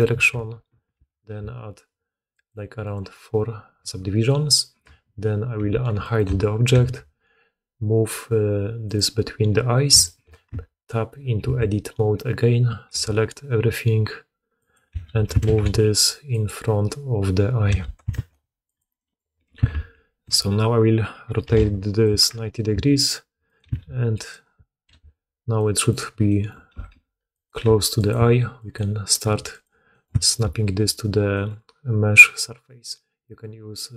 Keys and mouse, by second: 0.8 ctrl+r, 3.7 Tab, 5.1 shift+click, 5.3 shift+middle click, 5.4 shift+click, 5.5 shift+2, 5.6 shift+middle click, 6.6 g, 10.4 Tab, 11.3 a, 12.8 s, 14.8 g, 17.6 g, 19.4 r, 22.6 s, 23.5 g, 24.8 KP_Decimal, 25.0 click, 26.6 r, 27.5 g, 28.1 s, 29.1 g, 30.0 shift+middle click.